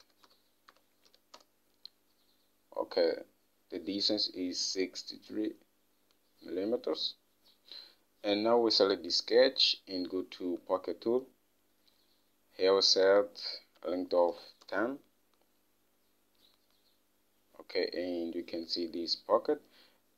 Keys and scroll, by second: 0.0-2.0 typing, 14.8 typing.